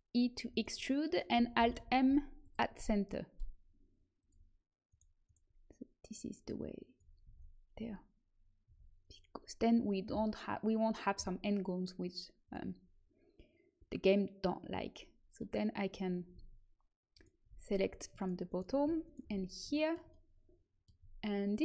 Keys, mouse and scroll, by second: 1.5 alt+m, 4.1 click, 7.0 click, 7.2 a, 7.7 Tab, 8.6 Tab, 12.4-14.8 drag, 15.3-17.5 middle drag, 17.1-20.4 right drag, 19.3-20.4 middle drag.